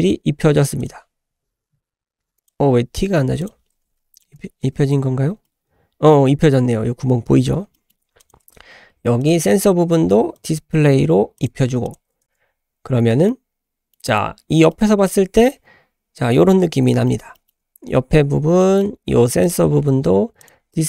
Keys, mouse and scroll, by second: 0.8 click, 2.4 click, 3.4 click, 4.2 Tab, 4.3 Tab, 4.9 Tab, 5.3 scroll down 1, 5.4-6.1 middle drag, 7.3-7.6 scroll down 2, 7.7 shift+middle click, 8.2 click, 8.4 Tab, 9.2 click, 10.3 click, 11.4 click, 11.8 click, 12.5 Tab, 12.5-13.2 scroll down 1, 13.2-13.9 middle drag, 14.7 middle click, 16.5-16.9 scroll down 3, 17.1 shift+middle click, 17.3 shift+middle click, 17.8 Tab, 18.1-18.5 scroll up 3, 18.6 shift+middle click, 19.4 click, 20.4 click.